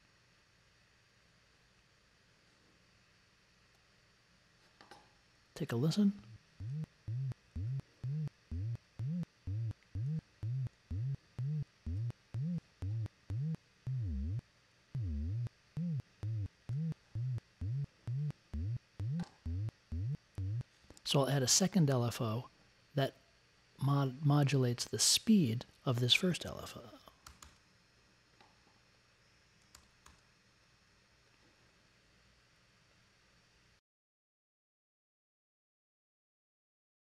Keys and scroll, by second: 27.2 super+c, 27.4 super+v, 29.7 super+c, 30.0 super+v.